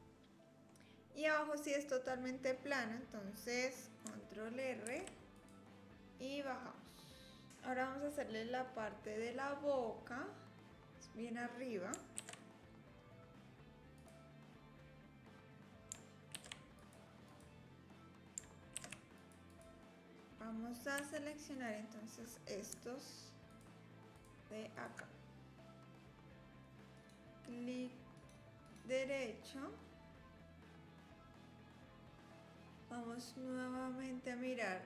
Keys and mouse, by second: 0.1 click, 4.8 ctrl+r, 12.2 ctrl+r, 16.3 ctrl+r, 18.7 ctrl+r, 21.0 3, 23.5 shift+click, 24.1 shift+click, 24.7 shift+click, 27.0-28.3 drag, 28.7-31.8 drag.